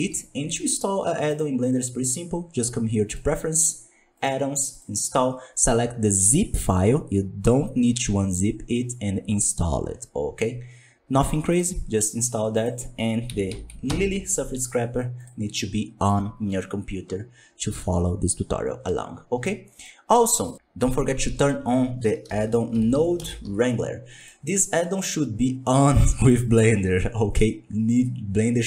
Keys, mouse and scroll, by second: 1.2-4.3 drag.